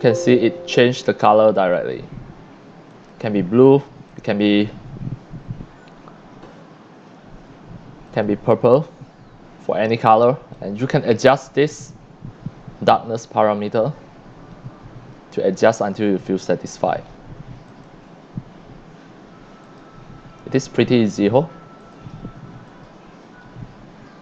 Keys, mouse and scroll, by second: 1.7 click, 2.9 click, 4.1 click, 8.1 click, 10.6-15.1 drag, 17.7 click, 19.6 click, 21.8 click, 22.7 click.